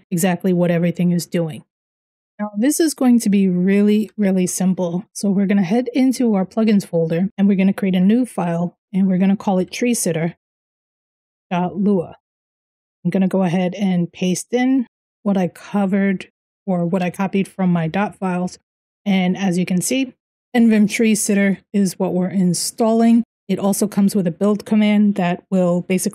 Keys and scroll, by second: 3.9 ctrl+n, 5.1-7.6 typing, 5.4 Return, 6.0 Return, 6.9 Return, 8.7-12.1 typing, 12.7 Return, 13.1 ctrl+v, 14.3-21.0 typing, 22.6-23.2 typing, 24.3-25.0 typing.